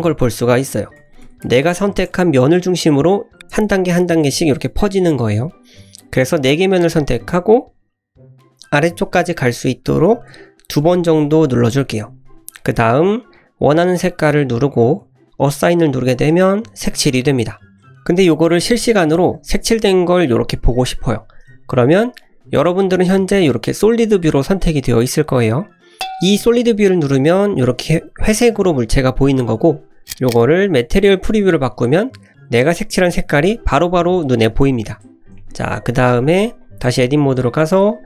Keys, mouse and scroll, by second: 0.7 ctrl+KP_Subtract, 2.7 click, 3.1 click, 3.5 ctrl+KP_Add, 5.7 click, 6.3-6.6 drag, 7.0 scroll up 1, 7.3 middle click, 7.8 scroll up 1, 8.0 middle click, 10.3 ctrl+KP_Add, 11.1 ctrl+KP_Add, 14.2 click, 16.2 click, 17.7 scroll down 1, 22.2 click, 28.0 Tab, 30.7 click, 31.9 click, 32.3 middle click, 33.7-34.7 middle drag, 35.3 shift+middle drag, 35.8-36.2 scroll up 1, 36.2-36.6 scroll down 2, 36.6 click, 36.8 Tab, 37.1 scroll up 2, 37.4 shift+middle click, 37.8 middle click.